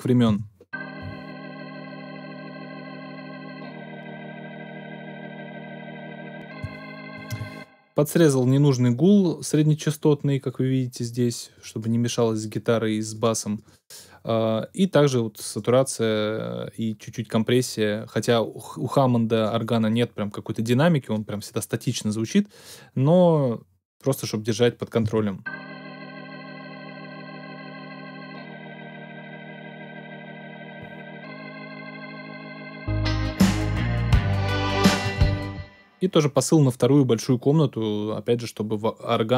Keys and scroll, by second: 0.2 space, 7.3 space, 25.0 space, 35.0 space.